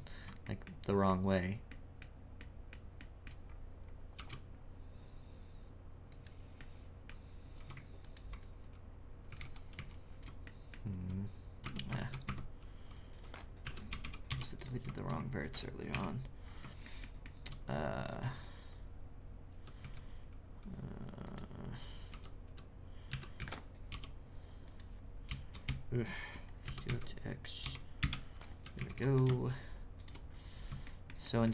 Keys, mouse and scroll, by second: 0.0-0.4 scroll down 4, 0.4-3.5 shift+middle drag, 3.8-4.2 scroll up 4, 6.6-7.6 middle drag, 8.0 alt+right click, 10.1-10.4 scroll down 4, 10.4-11.6 shift+middle drag, 11.6 Tab, 12.0 shift+s, 12.3 Tab, 13.6 s, 15.9 KP_1, 16.4 scroll up 4, 16.8 shift+middle click, 17.6-18.1 scroll up 1, 18.1 right click, 18.7-19.5 scroll up 1, 19.5 i, 23.1 g, 25.2 ,, 25.6 ., 26.6 s, 28.8 g, 30.3-30.6 scroll down 5, 30.8-31.5 shift+middle drag.